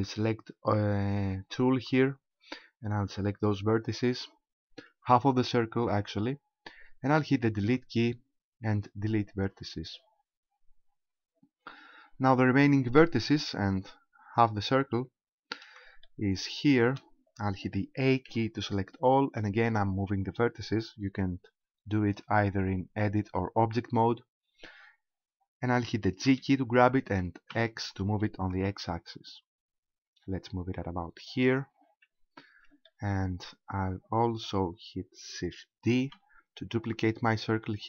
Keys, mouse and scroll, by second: 7.6 Delete, 10.5-12.3 scroll down 3, 13.6-15.2 scroll down 1, 15.2-15.6 scroll down 2, 16.1 shift+middle click, 18.3 a, 26.3 g, 31.5 ctrl+click, 32.1-32.9 scroll down 2, 32.9 shift+middle click, 36.0 shift+d.